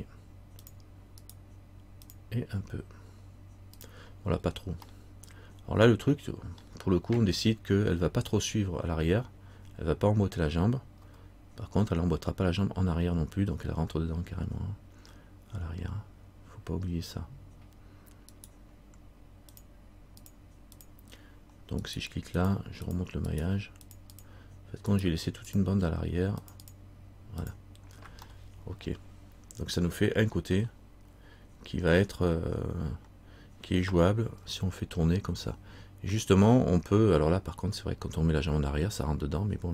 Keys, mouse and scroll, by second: 1.4 right click, 2.2 click, 4.6 scroll down 1, 6.8 middle click, 19.7 click, 22.0 right click, 22.5 click, 23.4 right click, 24.0 click, 25.1 right click, 25.1 click, 25.6 click, 27.5 click, 27.7 click, 29.9 middle click.